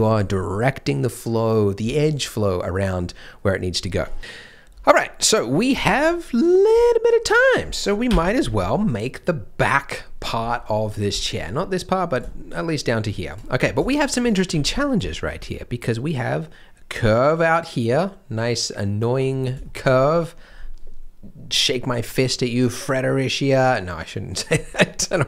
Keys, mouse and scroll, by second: 2.0 scroll down 1, 2.6 middle click, 5.2 middle click, 5.5 scroll down 1, 5.8 shift+middle click, 6.2 middle click, 6.8 shift+middle click, 7.4 middle click, 8.6 scroll down 1, 11.1 shift+middle click, 13.3 shift+w, 13.5 scroll up 1, 14.0 shift+m, 14.4 z, 15.1 shift+m, 15.3-16.1 scroll up 1, 19.2 scroll down 1, 19.6 shift+middle click, 19.9-22.3 scroll up 1.